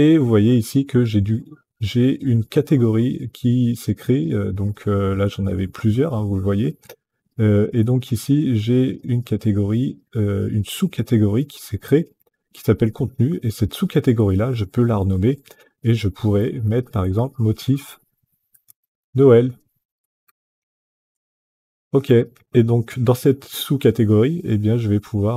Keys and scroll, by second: 16.4-20.8 typing.